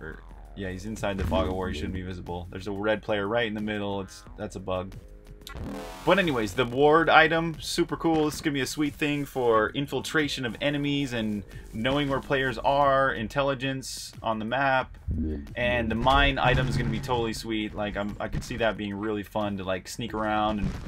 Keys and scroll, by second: 0.0-20.8 typing.